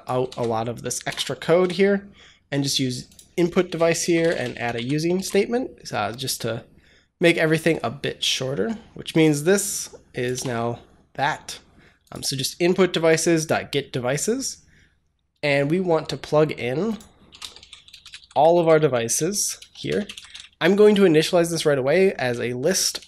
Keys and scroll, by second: 0.1 ctrl+c, 0.9 BackSpace, 1.5 Delete, 3.5 Return, 3.5-4.6 typing, 5.0 ctrl+s, 10.2 BackSpace, 17.0-20.6 typing, 22.0 Return, 22.9-23.0 typing.